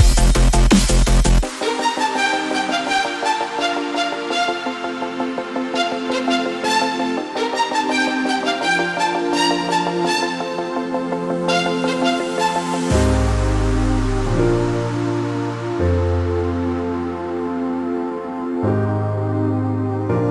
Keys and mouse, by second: 3.8 right click, 4.7 click, 6.7 ctrl+z, 7.3 click, 8.8 right click, 9.5-12.5 drag, 14.5 Up, 14.7 Right, 14.9 Down, 15.3 Right, 16.5 shift+click, 16.9 Up, 18.3 Left, 19.7 click, 20.0 space, 20.1 click.